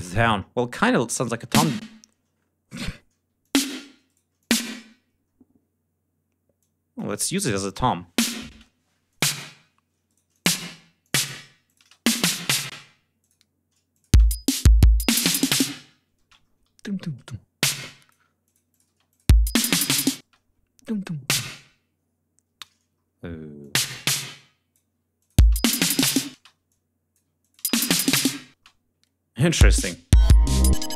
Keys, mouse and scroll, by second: 1.1 click, 1.3 space, 1.9 d, 2.6 shift+right click, 3.1 shift+d, 3.3 shift+click, 4.0 shift+right click, 4.3 shift+click, 6.5 click, 7.4 click, 7.6 space, 8.4 space, 9.0 click, 10.0 shift+right click, 10.2 shift+click, 11.0 click, 11.6 click, 11.7 space, 12.0 ctrl+scroll down 2, 12.6 ctrl+space, 12.8 ctrl+g, 13.1 ctrl+click, 13.8 click, 14.0 space, 16.1 space, 16.3 ctrl+scroll up 2, 16.6 ctrl+scroll down 2, 16.7 ctrl+e, 17.5 click, 18.4-18.9 drag, 18.8 space, 19.0 click, 20.1 space, 20.8 e, 21.2-22.7 drag, 22.9 ctrl+scroll up 2, 23.5-24.9 ctrl+drag, 25.1 alt+click, 25.3 alt+space, 26.2 space, 26.6 alt+click, 27.3 alt+click, 27.5 alt+space, 28.5 space, 28.5-28.9 ctrl+scroll down 2, 29.3 click, 29.5 space, 29.7 ctrl+scroll up 2.